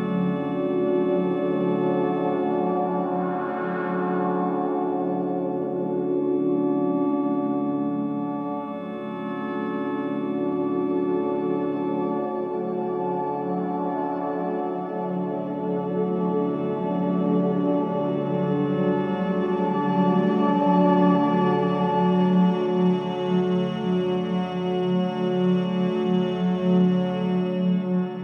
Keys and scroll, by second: 0.8 4, 8.1 F9, 16.8 3, 18.0 ctrl+z, 20.1 3, 24.5 ].